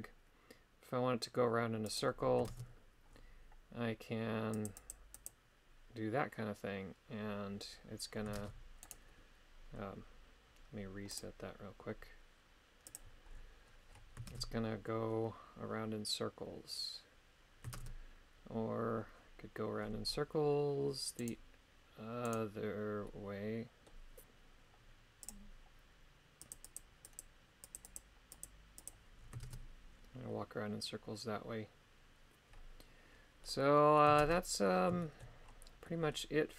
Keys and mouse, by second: 1.9 click, 2.5 shift+space, 4.6 click, 4.8 click, 5.2 click, 8.4 shift+space, 8.8 right click, 13.0 click, 14.3 shift+space, 17.8 shift+space, 21.2 right click, 22.3 right click, 23.0 middle click, 25.2 click, 26.4 click, 26.6 click, 27.2 click, 27.6 click, 27.8 click, 28.3 click, 28.8 click, 29.4 shift+space, 33.4 middle click, 34.2 shift+space, 35.0 shift+middle click, 35.9 middle click.